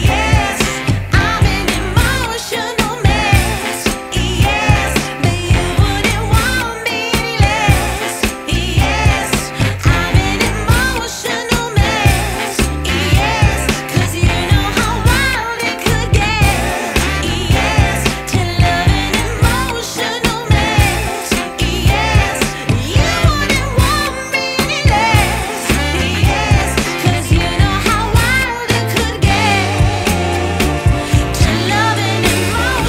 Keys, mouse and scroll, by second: 0.8 click, 1.7 ctrl+shift+click, 3.6-5.3 shift+drag, 5.8 click, 8.8 Return, 9.6 click, 9.9 scroll down 1, 10.2-10.9 scroll up 1, 10.9 click, 12.7 right click, 14.5 click, 15.0 scroll down 1, 15.2-15.9 scroll up 1, 15.9 click, 17.1 right click, 19.2-20.7 drag, 20.7 scroll down 1, 20.9-21.2 scroll up 1, 21.7-23.9 ctrl+shift+drag, 28.5 Tab, 28.7 right click, 29.2 scroll down 1, 29.7 right click, 30.0 scroll down 1, 30.2 scroll up 1, 30.3 right click, 30.9 scroll down 1, 31.0 scroll up 1, 31.2 right click, 32.3 click.